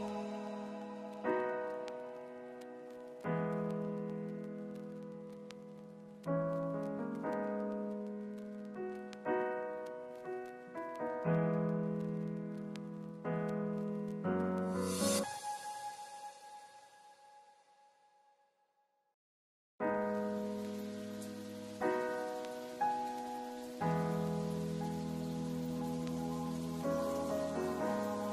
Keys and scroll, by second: 15.1 ctrl+s, 16.0 ctrl+s, 16.6 ctrl+space, 18.9 ctrl+s.